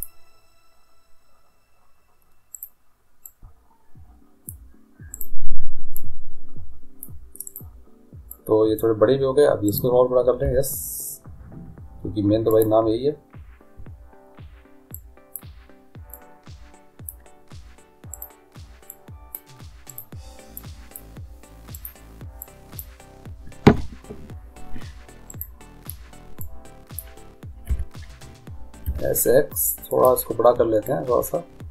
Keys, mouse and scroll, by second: 2.5-4.4 right drag, 3.3-5.2 drag, 5.2 right click, 7.0 click, 7.8 right click, 9.2-10.3 drag, 9.2 right click, 9.7-11.5 right drag, 10.5 s, 15.0-18.1 drag, 18.4-23.8 right drag, 19.1-24.4 drag, 25.5-27.3 right drag, 26.6-28.4 drag, 27.9 s, 31.1-31.7 drag.